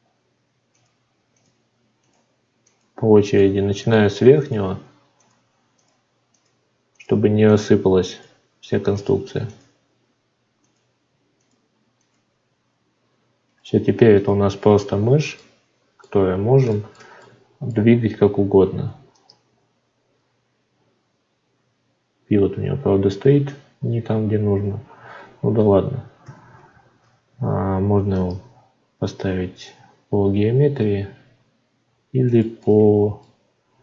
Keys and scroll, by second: 26.5 shift+a.